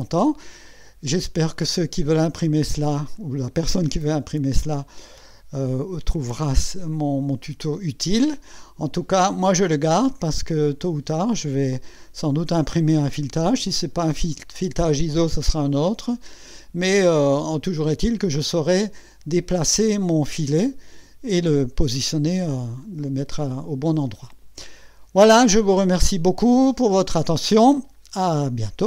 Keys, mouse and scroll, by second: 0.0-6.5 drag, 6.9-9.5 drag, 11.1 right click, 11.3 right click.